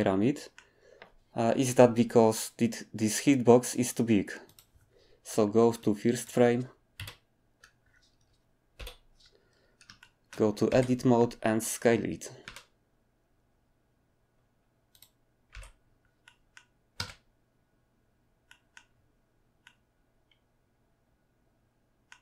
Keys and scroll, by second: 7.0 Right, 8.7 7, 10.7 Tab, 12.5 s, 15.5 Tab, 16.9 space.